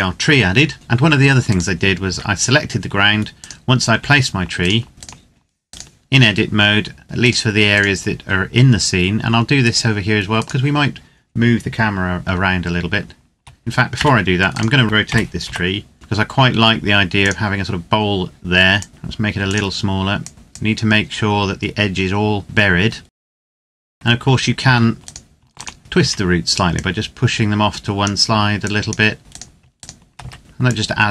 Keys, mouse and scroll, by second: 1.3 right click, 1.9 Tab, 3.1 right click, 4.3 shift+right click, 13.7 Tab, 14.2 right click, 14.8 r, 15.2 z, 16.9 click, 18.9 s, 19.2 click, 22.8 right click, 23.1 Tab, 23.2 right click, 23.4 Tab, 23.5 right click, 23.6 Tab, 23.6 right click, 23.7 o, 23.9 click, 24.9 right click, 25.3 shift+right click, 25.8 z, 26.4 click, 29.0 z, 29.2 right click, 29.5 shift+right click, 29.9 z, 30.4 click.